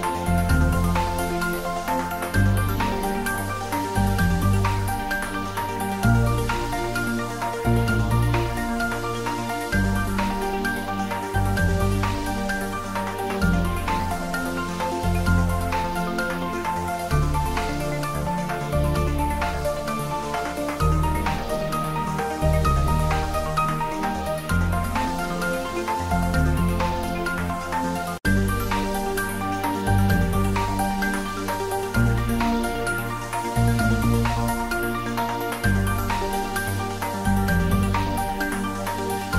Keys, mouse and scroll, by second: 0.5 ctrl+s, 2.9 ctrl+s, 3.6 click, 4.9 shift+click, 5.4 ctrl+middle click, 5.8 shift+middle click, 7.2 click, 7.7 shift+click, 9.2 ctrl+j, 10.0 click, 12.9 click, 14.0 ctrl+s, 15.3 ctrl+s, 15.6 ctrl+middle click, 16.2 shift+middle click, 16.6 ctrl+shift+middle click, 17.1 shift+middle click, 18.3 click, 21.1 ctrl+middle click, 21.4 shift+middle click, 22.0 ctrl+s, 26.5 shift+middle click, 27.1 click, 28.2 click, 29.5 ctrl+middle click, 29.9 middle click, 30.3 ctrl+middle click, 30.9 ctrl+middle click, 31.5 ctrl+middle click, 32.2 shift+a, 32.6 click, 33.1 c, 33.5 click, 35.7 click, 35.9 middle click, 37.0 ctrl+middle click, 37.7 middle click, 38.5 middle click, 39.2 3.